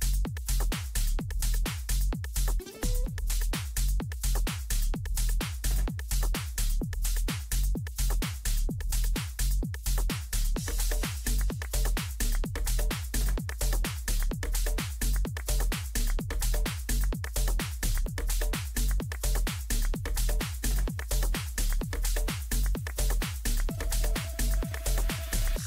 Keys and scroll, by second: 3.2 g, 15.0 ctrl+g.